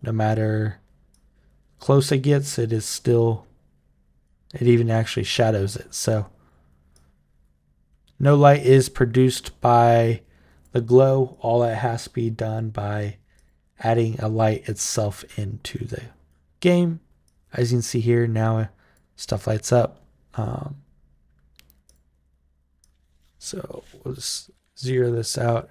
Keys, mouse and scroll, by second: 0.9 click, 1.9-4.0 right drag, 5.9-6.3 drag, 6.7-10.4 drag, 11.1 click, 12.2 click, 13.2 click, 14.5-16.1 right drag, 17.0-18.7 drag, 19.5 click, 21.6 click, 22.6 click, 24.4 Tab, 24.8 Tab, 25.2 Tab, 25.6 Tab.